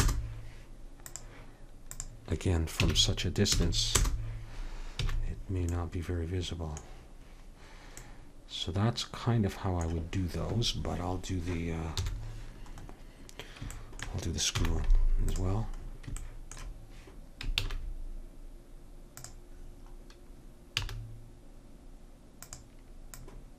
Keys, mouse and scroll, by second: 1.1-3.6 drag, 5.1 a, 12.0 KP_7, 14.5 z, 17.6 shift+a, 20.8 s, 23.1 click.